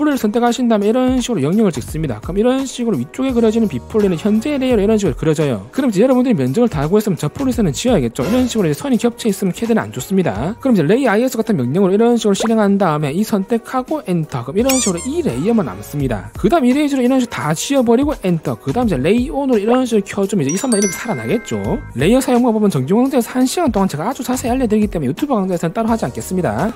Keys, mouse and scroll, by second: 1.1 click, 1.6 click, 2.0 click, 2.5 click, 2.9 click, 3.4 click, 4.5 right click, 9.0 click, 9.3 click, 9.6 click, 9.9 click, 13.2 right click, 14.0 click, 14.0 right click, 14.5 right click, 16.7 e, 16.9 right click, 17.3 click, 17.8 click, 18.5 right click.